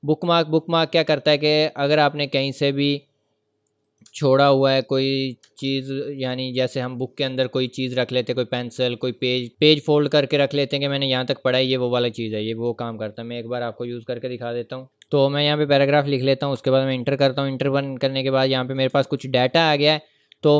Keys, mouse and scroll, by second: 2.5 scroll up 1, 2.5 scroll down 1, 3.0-3.8 scroll up 1, 3.8 click, 5.4 BackSpace, 14.9 typing, 15.0 click, 16.6 Return, 17.3 scroll up 1, 19.0-19.4 ctrl+scroll down 1, 19.8 ctrl+scroll down 1.